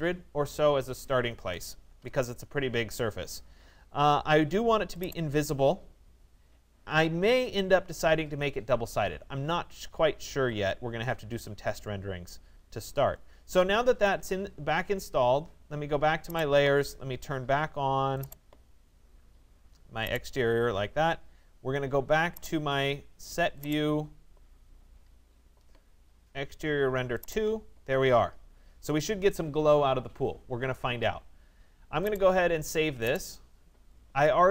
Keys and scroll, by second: 1.9 Tab.